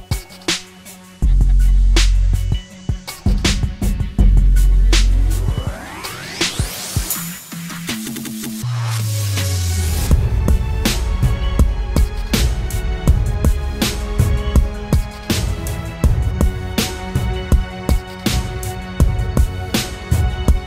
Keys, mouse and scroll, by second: 7.4-8.5 typing, 11.1 typing, 11.7 double click, 12.3-14.6 typing.